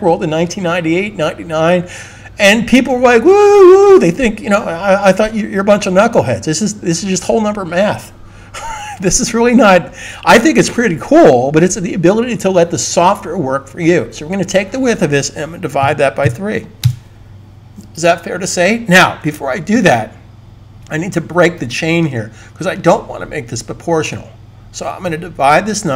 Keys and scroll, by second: 15.5-16.6 typing, 19.6 super+z.